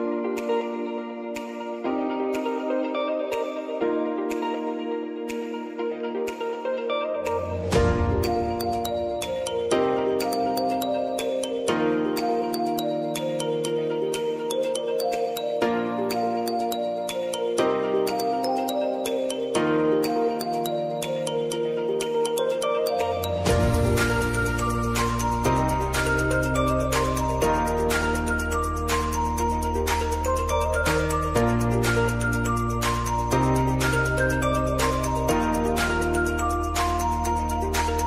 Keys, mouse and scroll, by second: 3.0 ctrl+d, 3.6 click, 4.1 s, 4.8-7.6 drag, 10.5 Return, 11.3 click, 11.7 t, 12.4 click, 13.3 Return, 14.9 click, 15.7 Return, 16.4 click, 17.6 space, 20.1 space, 20.6 click, 22.2 p, 22.8-31.3 drag, 31.3-33.3 drag, 33.3 space.